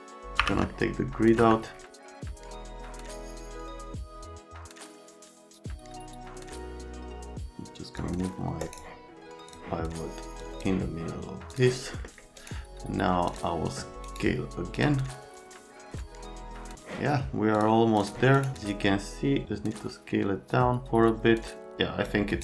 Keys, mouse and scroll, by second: 0.0-0.9 typing, 0.0 right click, 0.2 right click, 0.7 right click, 1.3 F3, 3.6 middle click, 3.7 middle click, 3.8 F3, 4.0 middle click, 4.5 middle click, 5.1-5.9 typing, 5.5 right click.